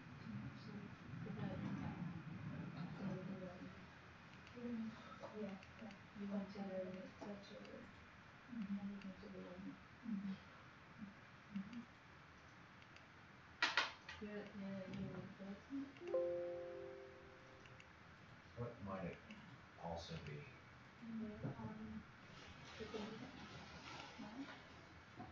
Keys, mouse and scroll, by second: 5.8 click, 6.9 click, 22.1-23.0 scroll up 10, 23.8 click.